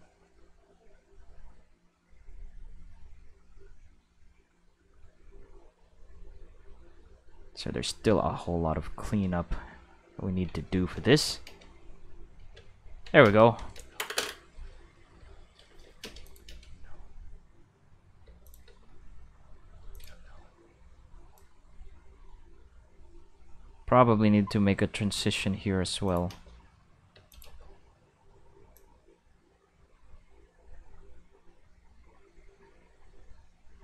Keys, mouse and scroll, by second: 0.5-1.6 drag, 2.5-4.5 drag, 5.2 click, 6.5-7.7 drag, 8.3 click, 10.2 ctrl+middle click, 11.2 click, 11.4 space, 12.7 ctrl+middle click, 13.2 space, 13.4 click, 13.7 space, 15.1 q, 15.7 shift+middle click, 16.0 space, 16.2 click, 16.5 space, 18.2 space, 18.4 click, 18.6 space, 19.8 space, 19.9 click, 20.1 space, 21.2 space, 21.3-25.2 drag, 26.1 click, 26.3 space, 27.1 space, 27.3 click, 27.4 space, 28.6 space, 28.7-33.8 drag.